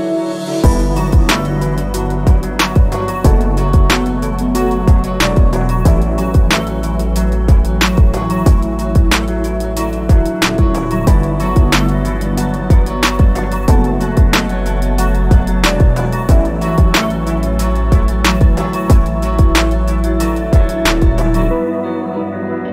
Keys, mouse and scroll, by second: 0.7 click, 0.9 middle click, 1.2 Tab, 1.3-2.5 middle drag, 2.5 KP_1, 3.0 Tab, 3.2 scroll up 2, 3.6 click, 3.7 alt+click, 3.9 s, 5.9 alt+click, 7.1 g, 9.6 s, 11.2 click, 11.7 alt+click, 12.0 alt+shift+click, 13.2 ctrl+b, 14.8 shift+d, 15.0 g, 16.7 KP_7, 17.0-17.7 scroll up 6, 17.2 shift+middle click, 18.7 e, 20.0 scroll down 4, 20.2 ctrl+z, 20.6 click, 21.5-21.9 scroll up 4, 22.0 e.